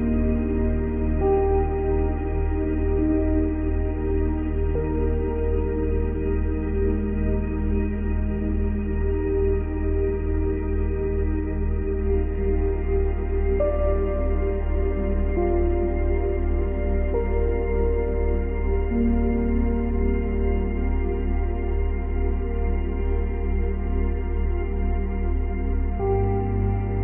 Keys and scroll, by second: 0.7 space, 3.3 space, 14.6 ctrl+c, 14.8 ctrl+v, 15.5 ctrl+c, 15.7 ctrl+v, 18.5 ctrl+c, 18.7 ctrl+v.